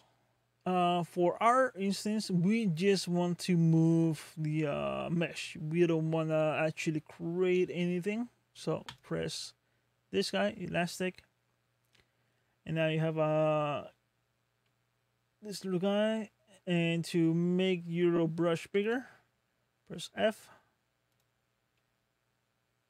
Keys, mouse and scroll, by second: 18.7 f.